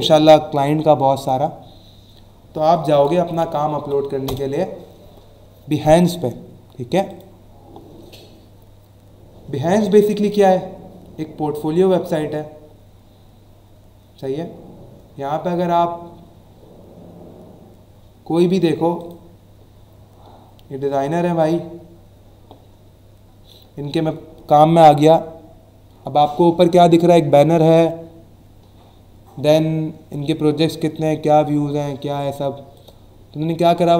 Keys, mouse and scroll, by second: 1.1 click, 2.4-4.3 typing, 7.0 click, 12.1 scroll down 1, 13.2 scroll up 1, 18.9 click, 21.3 click, 25.6-25.9 scroll up 1, 28.9 scroll down 1, 29.5 scroll down 1, 31.7 scroll up 1, 32.2 scroll up 1, 32.7 click.